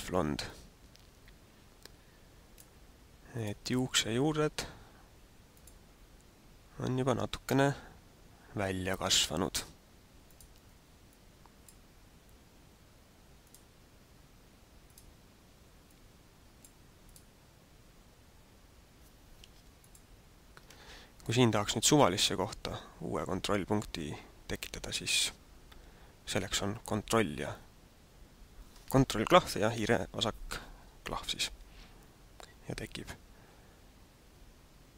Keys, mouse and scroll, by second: 3.3 click, 5.5 click, 8.9 click, 10.3 click, 13.3 click, 14.9 click, 20.0 ctrl+click.